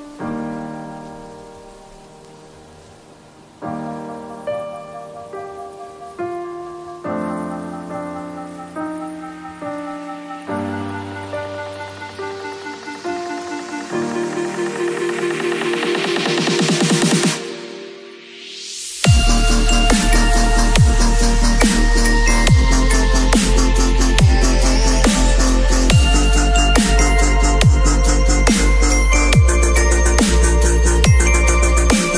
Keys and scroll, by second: 3.9 space, 8.2 space, 12.6 v, 14.5 space, 16.3 ctrl+a, 16.5 ctrl+c, 17.2 ctrl+w, 18.2 space, 23.1 ctrl+shift+v, 23.4 ctrl+t.